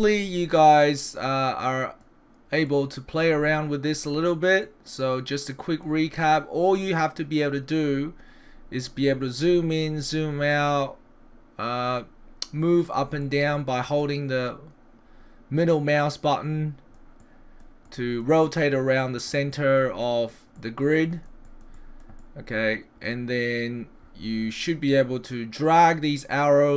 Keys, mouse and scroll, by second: 0.3 middle click, 2.7 middle click, 3.3 scroll up 1, 3.4-4.6 scroll down 5, 4.6 middle click, 8.5-9.5 scroll up 5, 9.5-10.3 scroll down 7, 10.5 middle click, 13.3 middle click, 14.0 middle click, 17.2 middle click, 17.9 middle click, 18.4 middle click, 19.0 middle click, 19.6 middle click, 20.1 middle click, 20.6 middle click, 21.0 middle click, 21.5 middle click, 21.8 middle click, 22.2 middle click, 25.8 click.